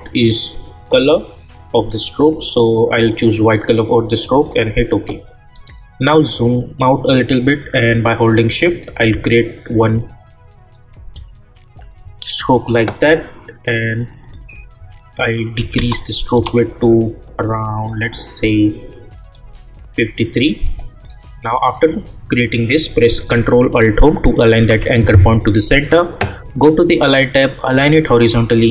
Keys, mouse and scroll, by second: 4.5 click, 5.5-6.0 scroll down 1, 8.6 click, 16.3 Return, 17.2-20.6 drag, 24.6 ctrl+alt+Home, 27.7 click.